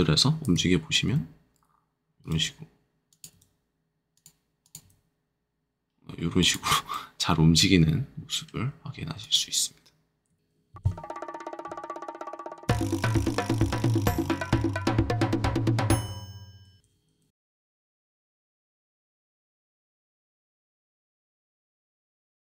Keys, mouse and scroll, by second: 1.0 r, 2.2 click, 3.1 click, 3.3 r, 4.1 click, 4.6 click, 4.8 r, 6.4 click, 6.9 middle click, 7.8-9.2 scroll, 9.2 click, 10.3 r.